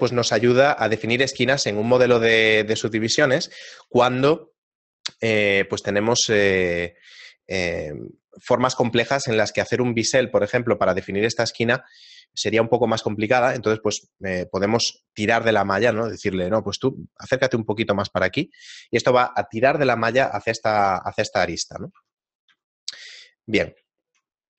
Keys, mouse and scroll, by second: 15.9 shift+e, 22.0 Tab, 22.4 right click, 22.5 x, 23.1 middle click, 23.7 scroll down 1, 24.0 shift+middle click, 24.2 middle click.